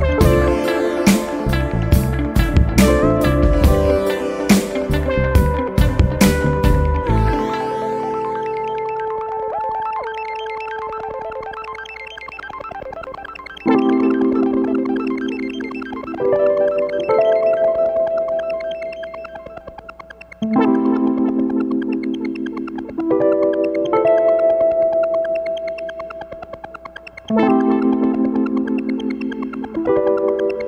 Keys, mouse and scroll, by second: 0.4 shift+8, 1.6 2, 2.4 click, 3.4 click, 5.2 click, 6.8 click, 8.6-10.1 typing, 11.6-13.7 typing, 15.1-17.0 typing, 18.5 click, 19.1 click, 20.0 scroll down 1, 22.1 click, 22.9 space, 23.7 click, 24.3 space, 25.3 click, 26.4 1, 26.9 2, 29.3 click.